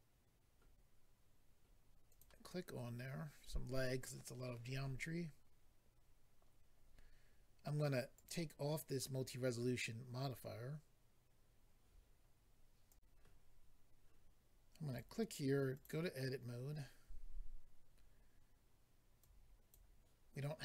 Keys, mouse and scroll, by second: 2.1 click, 8.1 click, 8.2 click, 12.9 click, 13.0 click, 14.9 click, 15.0 click, 15.7 click, 15.8 click, 16.6-17.0 scroll up 2, 19.2 click.